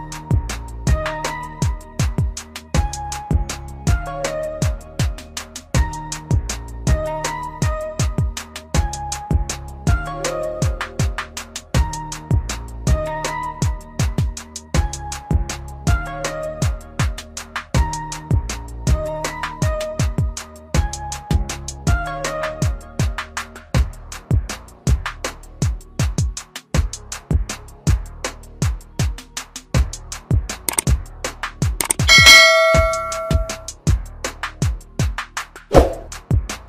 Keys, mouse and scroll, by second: 6.1 click, 6.1 typing, 17.9 alt+click, 18.9 click, 24.6-25.5 typing, 26.6 click, 26.8 typing, 29.2 typing, 31.0 click, 31.0 typing.